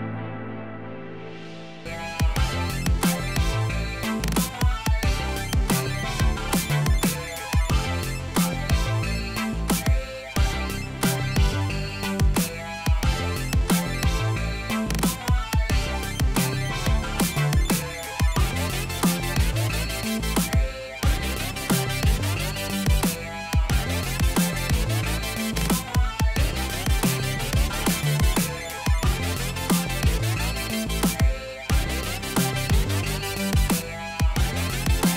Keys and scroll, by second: 9.1 0, 9.3 Return, 32.7-33.6 typing.